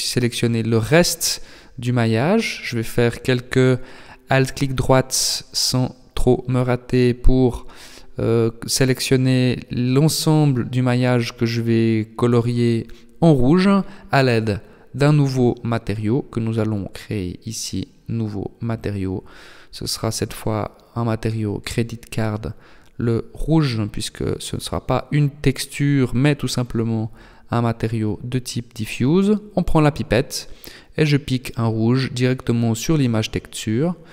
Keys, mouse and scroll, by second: 0.1 alt+shift+right click, 1.7 alt+shift+right click, 3.0 alt+shift+right click, 4.5 ctrl+z, 4.9 ctrl+z, 6.3 alt+shift+right click, 6.9 middle click, 7.7-8.3 scroll up 2, 9.0 alt+shift+right click, 9.7 scroll down 2, 10.1 middle click, 15.9 click, 17.1 click, 17.5 click, 25.8 click, 27.1 click, 30.5 click, 32.5 click, 33.2 click.